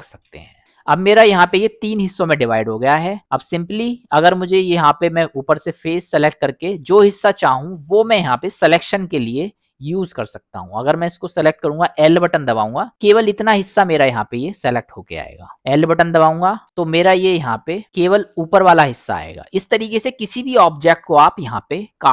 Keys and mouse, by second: 0.2 ctrl+l, 0.6 g, 1.3 middle click, 3.2 middle click, 4.5 click, 7.6 middle click, 12.2 l, 12.9 middle click, 14.1 middle click, 16.6 l, 17.8 middle click, 17.8 l, 19.3 middle click, 21.2 middle click.